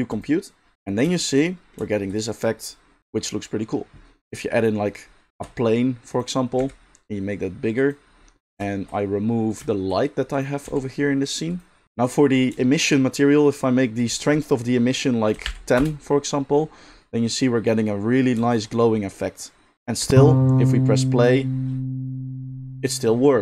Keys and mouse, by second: 5.3 shift+a, 6.6 s, 8.0-9.5 middle drag, 9.5-10.4 shift+drag, 10.6 x, 11.6 middle click, 12.5 shift+middle drag, 12.7 shift+middle click, 12.9-14.0 middle drag, 14.0-23.4 drag, 20.0 space.